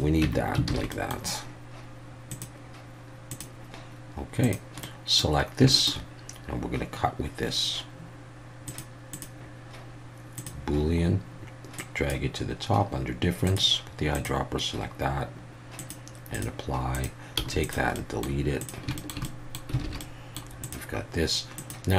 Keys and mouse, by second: 0.2 Tab, 0.7 alt+a, 0.9 middle click, 2.4-3.7 drag, 4.8-5.2 middle drag, 5.7 shift+middle click, 8.6 click, 9.1-10.5 drag, 11.8-12.2 drag, 13.5 click, 15.8-16.4 drag, 16.9 click, 17.4 x, 17.9 middle drag, 18.6 click, 19.0 shift+middle drag, 19.2 middle drag, 19.8 alt+a, 20.0 middle click, 20.6 click, 21.6-21.9 drag.